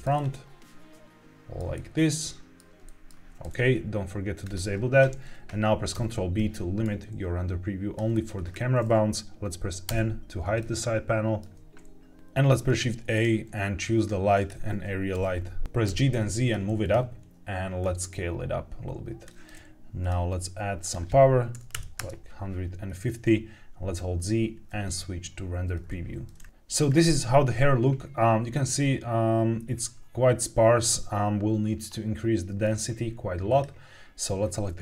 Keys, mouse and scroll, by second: 0.5 middle click, 1.6 shift+middle click, 2.8 middle click, 4.3 click, 5.8 ctrl+b, 8.3-8.9 scroll up 2, 9.8 n, 10.5-11.3 shift+middle drag, 12.1 shift+middle click, 12.1 scroll down 1, 12.4 shift+a, 15.0 g, 15.2 z, 15.8 g, 16.0 z, 16.7 click, 17.7 click, 19.9 click, 20.7-21.9 drag, 22.8-23.8 scroll down 1, 23.9 z, 26.3-26.8 scroll up 2, 26.8 scroll down 2, 26.9-29.3 scroll up 1, 29.3-30.1 scroll up 1, 33.4 click.